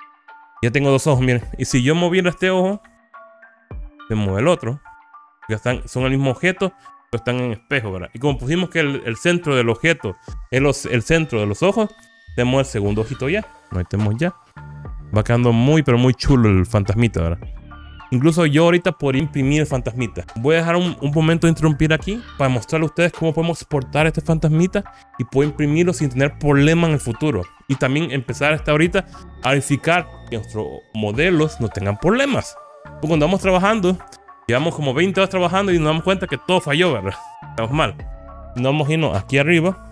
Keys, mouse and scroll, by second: 2.3 click, 2.7 g, 5.9 Escape, 13.5-18.8 middle drag, 13.5 click, 13.5 scroll down 3.